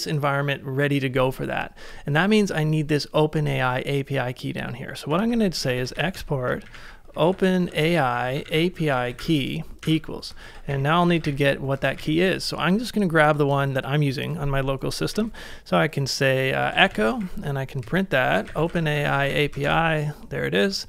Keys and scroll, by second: 4.9-7.8 typing, 9.8 shift+=, 10.5 ctrl+a, 11.1 ctrl+a, 11.9 ctrl+a, 15.1 typing, 16.4-19.1 typing.